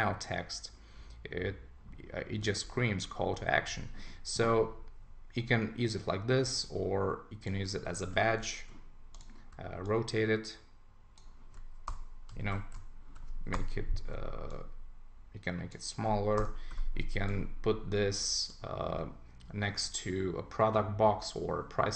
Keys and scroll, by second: 8.0 super+t, 11.9 Return, 12.4 super+t, 13.5 Return, 16.4 Return.